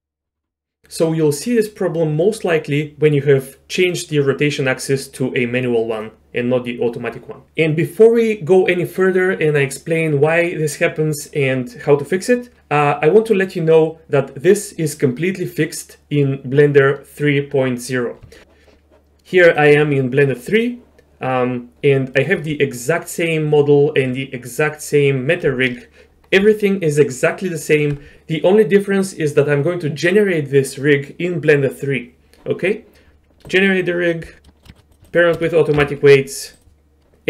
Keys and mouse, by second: 4.0-6.0 drag, 19.5-22.3 drag, 34.4 middle click, 34.7 shift+click, 35.1 shift+click, 35.8 ctrl+p.